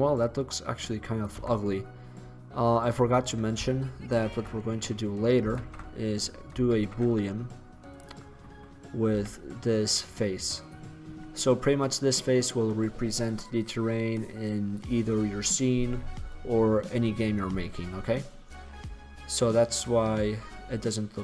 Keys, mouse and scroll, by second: 0.6-1.4 drag, 1.6 Tab, 4.2 shift+c, 5.6 shift+a, 6.8 shift+a, 9.2 s, 18.0-20.1 middle drag, 20.2 middle drag.